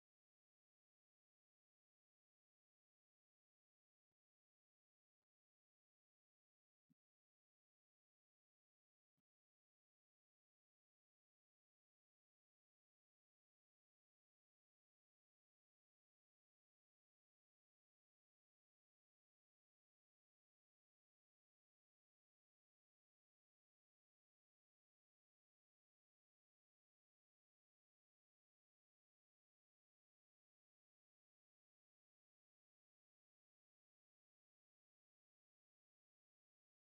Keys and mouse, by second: 0.6 click, 1.0 g, 2.9 click, 3.9 a, 4.7 click, 5.0 g, 6.5 click, 6.7 g, 8.8-12.4 drag, 13.0 b, 14.0 g, 14.6 s, 15.8 space, 17.0 space, 17.6-20.5 drag, 21.2 g, 22.8 s, 24.2 click, 25.0 s, 26.1 click, 26.4 b, 28.0 alt+a, 28.5 b, 29.5 g, 30.8 space, 33.0 space, 33.7 click, 34.0 click, 34.8 click, 35.0 space.